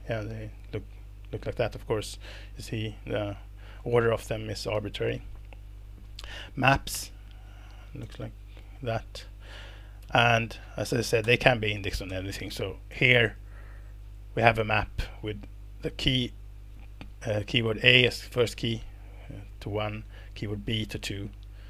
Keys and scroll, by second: 0.2 Escape, 1.8 alt+Return, 4.7 Escape, 7.5 Left, 8.0 alt+Return, 10.0 Escape, 10.5-12.9 typing.